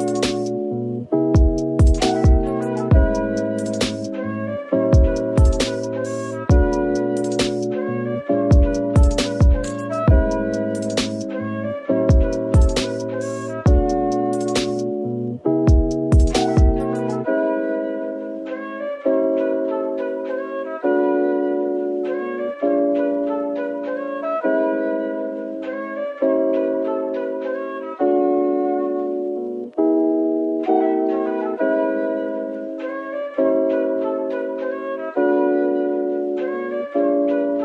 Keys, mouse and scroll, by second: 1.1 middle click, 6.7 double click, 12.1 s, 13.3 typing, 15.0 scroll up 1, 15.6-16.3 typing.